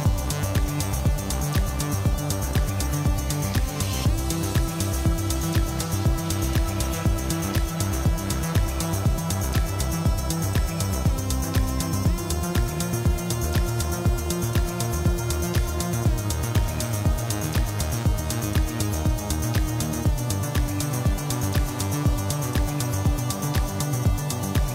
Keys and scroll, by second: 2.6 /, 5.3 alt+a, 10.2 g, 10.4 z, 18.6 5, 18.9 Return.